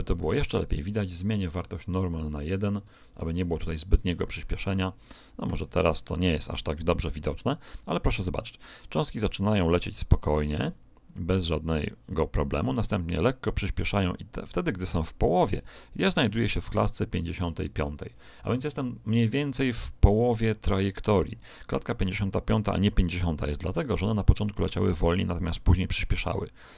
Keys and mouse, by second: 0.5 right click, 2.5 click, 8.3 click, 18.6-20.6 middle drag.